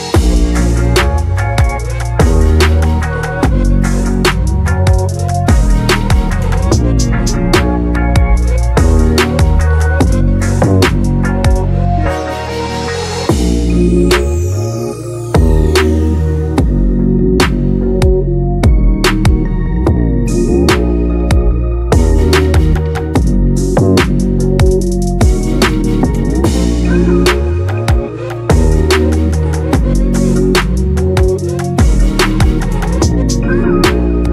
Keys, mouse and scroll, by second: 0.0-2.1 drag, 4.0 click, 4.9 click, 5.7-7.1 scroll down 1, 7.1-9.4 scroll down 1, 9.4-9.8 drag, 9.8-10.8 scroll down 2, 10.8-12.6 drag, 12.6-13.6 scroll down 2, 13.6-13.9 drag, 13.9-15.1 scroll down 1, 15.1 click, 16.5 click, 17.1-20.4 right drag, 20.4-22.4 drag, 24.0-26.1 drag, 29.4 click, 30.5 click.